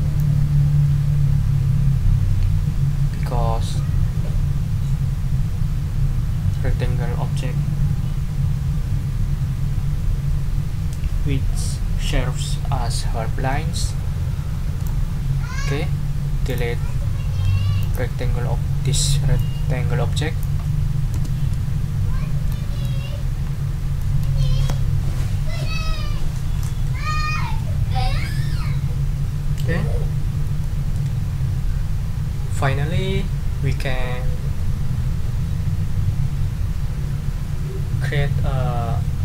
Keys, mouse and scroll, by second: 0.2-15.0 drag, 15.0-15.6 ctrl+scroll down 4, 16.5 click, 17.8 click, 19.4-20.6 drag, 21.1 Delete, 22.5 ctrl+click, 23.4 ctrl+scroll up 1, 24.0 ctrl+click, 30.6-34.8 drag.